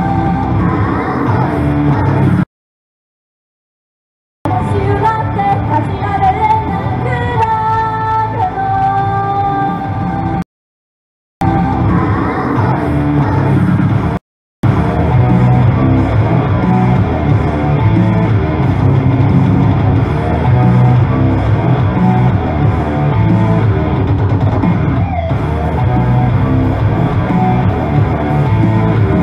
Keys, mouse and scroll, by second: 0.4 click, 4.5 space, 10.4 right click, 11.1 Return, 11.5 space, 14.2 right click, 14.4 Return, 14.7 space, 16.1 right click, 17.3 click, 18.7 right click.